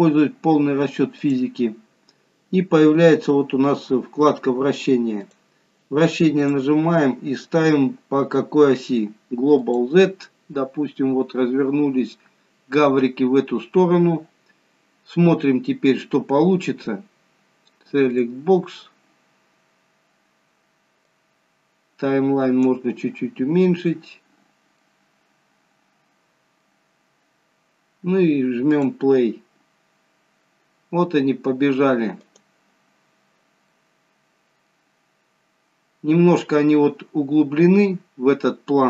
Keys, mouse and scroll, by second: 1.7 click, 3.1-4.2 scroll down 2, 5.2 click, 6.5 click, 12.9 scroll down 2, 14.2-15.6 scroll down 1, 18.3 click, 21.3 click, 23.5 scroll up 5, 24.4 scroll down 2, 25.0 middle click, 28.9 click, 32.4 click, 33.1 scroll down 2, 34.0 middle click, 35.4-35.8 scroll up 2, 37.8 scroll down 1.